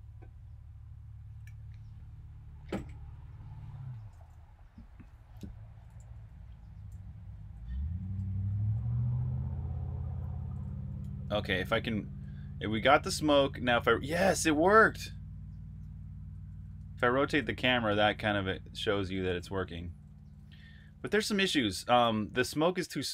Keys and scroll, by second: 5.7-11.9 typing, 13.3-23.1 typing.